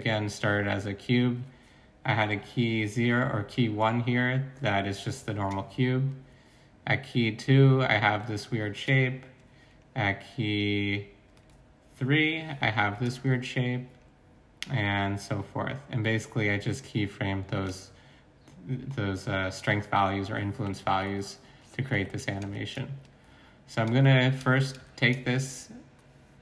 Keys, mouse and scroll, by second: 21.9 x.